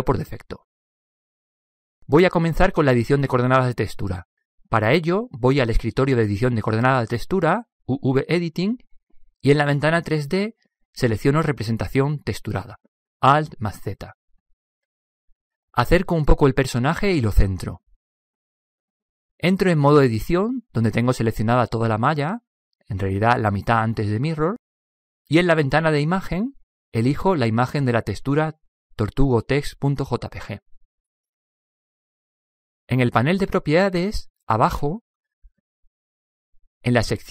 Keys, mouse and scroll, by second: 5.8-7.7 drag, 12.8 alt+z, 15.0-15.4 middle drag, 16.2-19.0 middle drag, 20.3 middle click, 20.5 Tab, 27.1-28.9 drag, 34.0-35.8 drag, 36.2-37.3 drag.